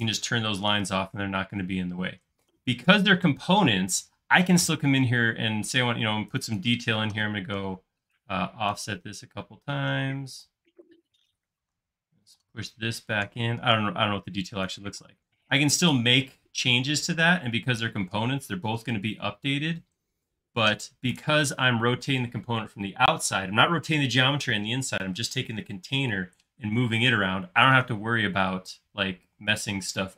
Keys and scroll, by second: 7.6 f, 10.0 f, 11.9-12.3 typing, 13.3 Escape, 15.1 space.